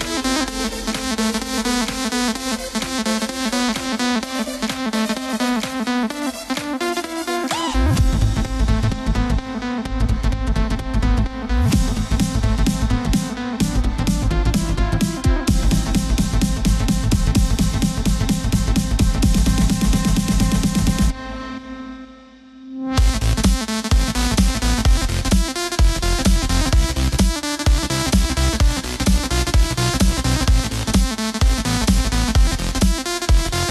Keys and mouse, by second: 0.6 z, 0.9 middle click, 8.3 click, 10.6 s, 13.3 click, 14.9 g, 19.5 click, 21.2 s, 22.3 click, 22.6 middle click, 22.7 KP_3, 25.7 e, 28.3 click, 30.2 s.